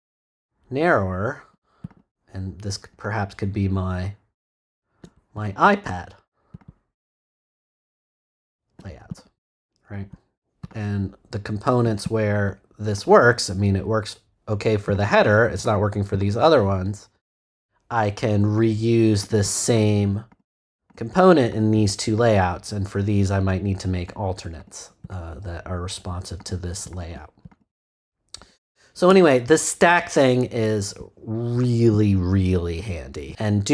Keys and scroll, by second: 29.0 BackSpace.